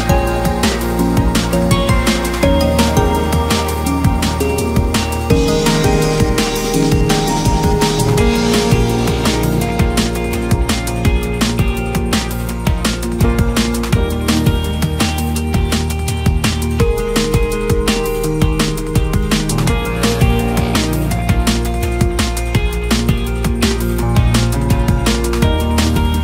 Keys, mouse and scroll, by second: 1.8 s, 3.4 click, 4.5 x, 5.6 click, 6.4-6.9 scroll down 2, 6.9 KP_3, 7.4-8.4 scroll down 2, 8.4 click, 11.1 KP_1, 11.9-12.5 scroll up 1, 12.9 click, 14.0 click, 14.9 KP_3, 15.4-16.2 scroll up 2, 16.2 click, 18.1 KP_1, 18.9 click, 19.5 click, 20.3 KP_3, 20.9-21.8 scroll up 2, 21.8 click, 23.4-24.2 ctrl+KP_Add, 24.9 r, 25.9-26.2 scroll down 2.